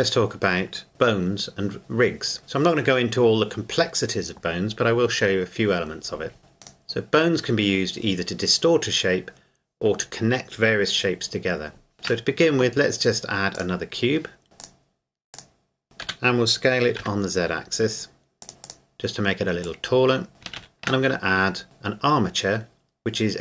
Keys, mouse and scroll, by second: 6.6 scroll down 1, 6.7 right click, 11.9 shift+a, 13.5 click, 14.6 click, 17.0 typing, 18.4 click, 20.3 scroll up 1, 20.6 shift+a.